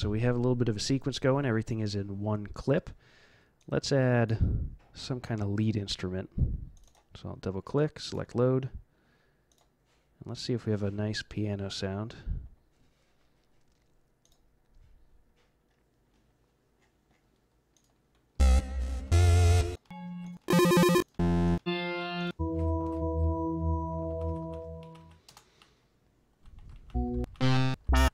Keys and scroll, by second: 18.3 z, 19.0 v, 21.5-23.4 typing, 24.1 Down, 24.2 Down, 25.2 Return, 25.6 Down, 26.1 Down, 26.8-28.1 typing, 27.2 Down, 27.7 Down.